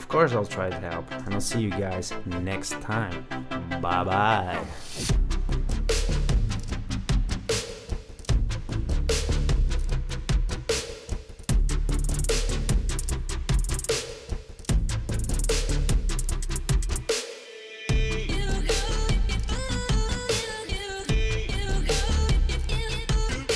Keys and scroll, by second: 1.2 space.